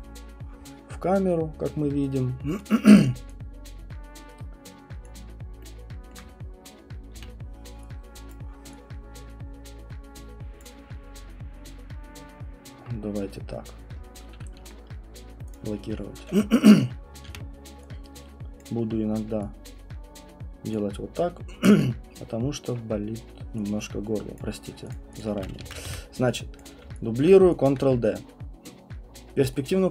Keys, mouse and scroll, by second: 2.7 click, 5.1 alt+click, 6.1 alt+middle click, 7.1 r, 8.3 click, 10.6 click, 15.5 click, 17.3 r, 18.6 click, 20.7 click, 24.4 click, 24.9 click, 25.2 click, 25.6 ctrl+d, 25.9 w, 26.6 click, 27.2 alt+click, 27.7 alt+click.